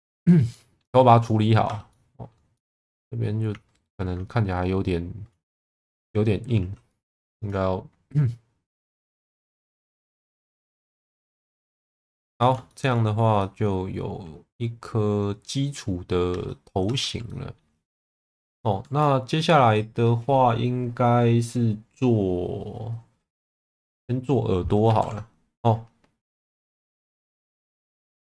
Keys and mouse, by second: 0.5 middle click, 1.3 middle click, 1.7 Tab, 1.9 middle click, 2.6-4.0 middle drag, 5.8 shift+middle click, 6.6 1, 7.0 click, 8.2 click, 9.7 Tab, 10.7 middle click, 11.5 ctrl+s, 11.9 middle click, 12.7 shift+middle click, 13.4-15.8 middle drag, 16.3 Tab, 16.9 Tab, 17.3 middle click, 18.1 middle click, 19.0 middle click, 25.0 ctrl+s.